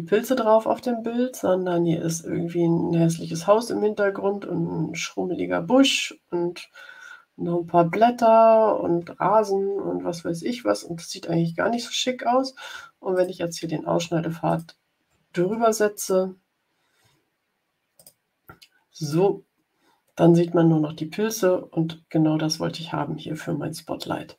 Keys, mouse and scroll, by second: 9.9 scroll up 2, 10.7 scroll down 2, 13.0 shift+click, 14.4 shift+click, 15.9 click, 17.9 click, 18.9 click, 22.9-23.5 scroll up 4.